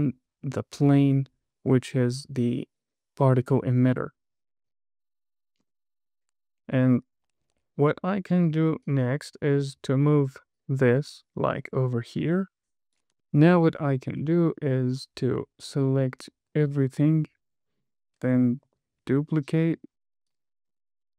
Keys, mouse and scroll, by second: 4.1 space, 6.0 space, 6.3 scroll down 2, 8.4-9.0 scroll up 1, 9.2 click, 10.9 click, 12.7 click, 13.5 click, 15.7 click, 16.4 click, 17.0 shift+click, 17.8 click, 19.3 shift+d, 21.0 click, 21.0 space.